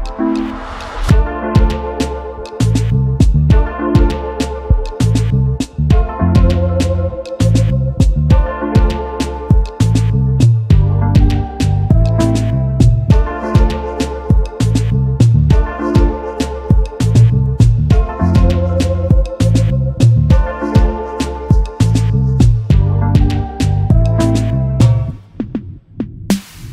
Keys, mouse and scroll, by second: 3.4 alt+scroll up 1, 8.0 alt+scroll down 1, 11.0 shift+click, 12.3 alt+scroll up 1, 13.4 right click, 14.8 space, 22.3 ctrl+8, 23.1 double click, 24.1 right click, 25.5 double click.